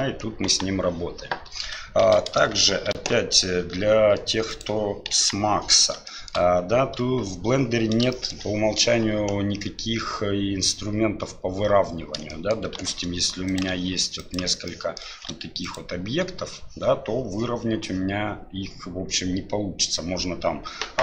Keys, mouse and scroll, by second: 0.5 Delete, 2.0 shift+c, 2.9 shift+a, 5.1 KP_1, 6.0 shift+middle drag, 7.0 KP_7, 8.1 shift+middle drag, 12.3 shift+middle drag, 12.7 shift+d, 13.7 shift+d, 14.6 shift+middle click, 15.2 shift+d.